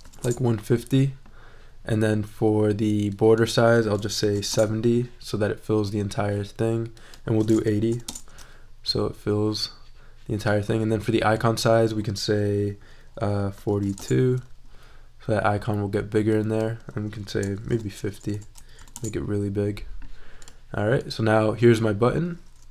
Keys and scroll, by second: 0.0-0.5 typing, 4.0-4.8 typing, 7.5-8.5 typing, 13.3-14.3 typing, 17.4-18.7 typing, 18.9 Return.